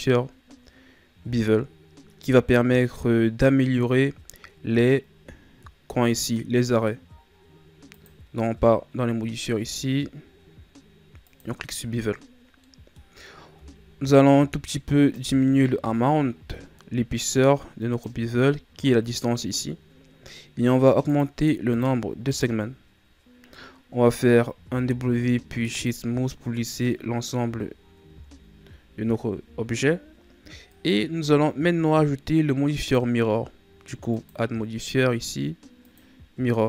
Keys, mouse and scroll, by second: 7.8-11.0 drag, 12.6-13.1 middle drag, 13.1-13.6 scroll up 1, 13.6-15.1 shift+scroll down 2, 15.1-18.1 drag, 21.0-23.5 drag, 23.5-24.6 middle drag, 24.6 w, 26.6 scroll down 3, 26.8-28.0 middle drag, 28.0 KP_1, 29.4 a, 30.7 right click, 32.8-36.6 drag.